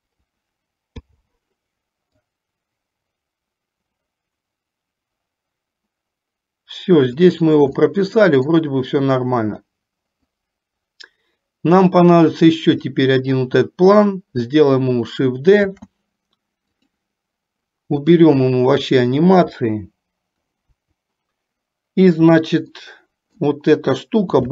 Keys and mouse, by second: 1.2 i, 3.1-7.5 drag, 8.0 middle click, 10.6-13.5 drag, 15.7 shift+d, 18.1-19.1 drag, 20.8 Delete, 22.8 middle click.